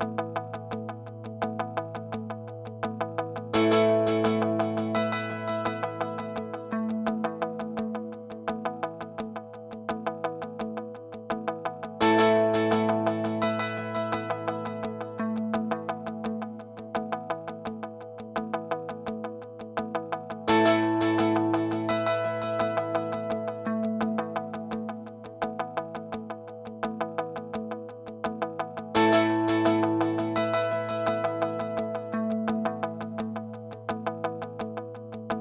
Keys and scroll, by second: 6.0 space, 13.9 super+z, 21.4 space, 22.7 space, 33.8 super+s, 34.9-35.4 typing.